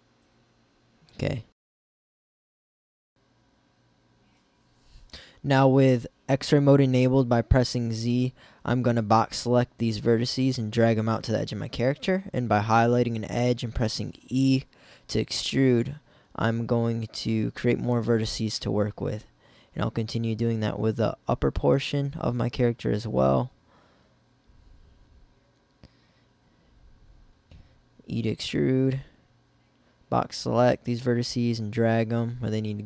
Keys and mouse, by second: 4.1 ctrl+r, 8.1 b, 9.9 b, 11.4 b, 13.1 b, 14.0 e, 15.1 click, 15.1 e, 16.3 b, 18.1 b, 20.2 click, 21.2 click, 22.7 b, 23.4 click, 24.4 b, 25.3 e, 26.7 e, 27.6 click, 27.8 e, 29.5 middle click, 30.2 b.